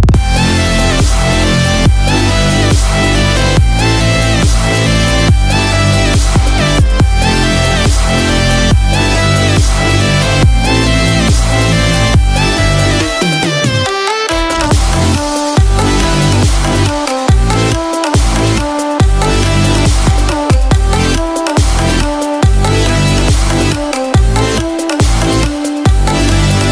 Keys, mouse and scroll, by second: 0.9-1.6 scroll up 6, 1.6 middle click, 2.6 middle click, 2.6 right click, 4.2 middle click, 5.4 click, 10.3-10.9 scroll down 1, 11.6 click, 11.8 middle click, 13.5 KP_7, 14.6 scroll down 1, 14.9-15.3 scroll up 2, 15.8 shift+middle click, 16.8 click, 18.2 shift+d, 24.9 click.